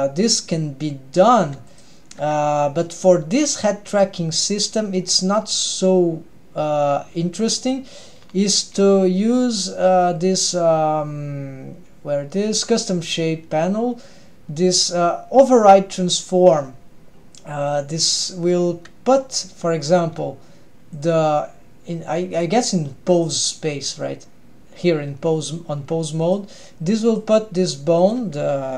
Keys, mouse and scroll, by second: 1.5 g, 7.6 drag, 8.2-10.5 scroll down 4, 10.5-11.8 scroll down 1, 18.1-23.1 drag, 26.3 drag, 27.1 click, 28.1-28.7 drag.